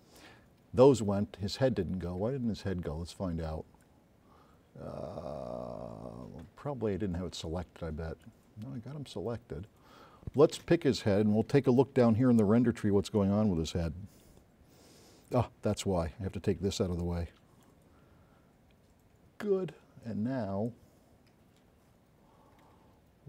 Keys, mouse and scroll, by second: 3.5-3.9 drag, 7.5 click, 8.7 middle click, 10.7 space, 11.0 click, 13.2 click, 14.8 click, 17.1-17.9 drag, 20.1 click.